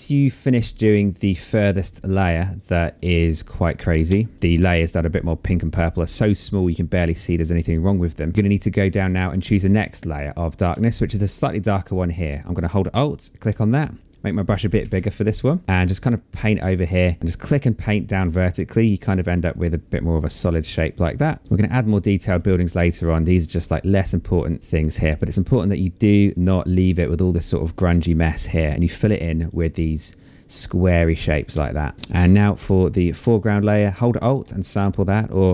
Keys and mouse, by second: 1.1 space, 1.3 click, 2.1 click, 2.8 shift+click, 3.6 space, 3.7 click, 12.8 alt+click, 15.6 click, 16.5 shift+click, 18.3 click, 19.7 click, 21.5 click, 21.5 space, 21.7 click, 22.1 space, 22.3 click, 24.3 space, 24.5 click, 25.5 click, 26.0 space, 27.9 click, 31.1 space, 31.2 click, 31.7 click, 33.8 alt+click.